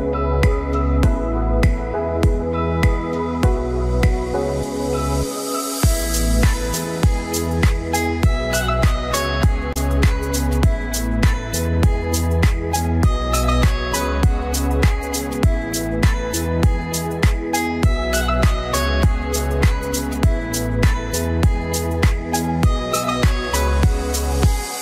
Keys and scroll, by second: 12.6 Delete, 13.5 ctrl+d, 17.4 ctrl+t.